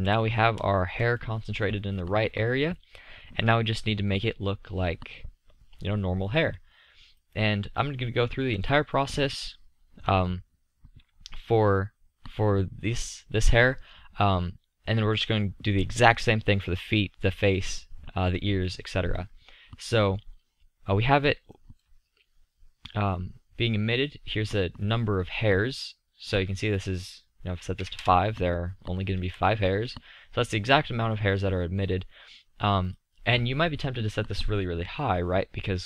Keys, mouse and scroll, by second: 0.0 z, 0.7 middle click, 3.2-7.2 middle drag, 9.0-21.7 middle drag, 23.7-26.7 middle drag, 28.7-29.8 middle drag, 29.2 z, 29.8 z, 34.8-35.8 middle drag.